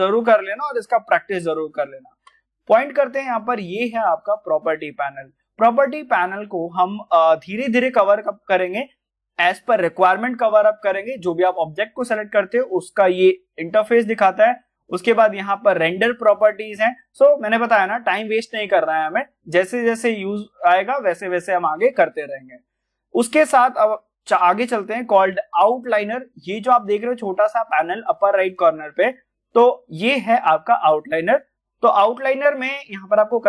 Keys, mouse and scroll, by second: 1.7 click, 1.7 click, 2.5-6.7 middle drag, 11.5 click, 15.2 click, 19.2-19.8 scroll down 1, 19.8-21.7 scroll up 1, 31.9 middle click, 32.0-32.3 scroll up 1, 32.3 click, 32.9 middle click.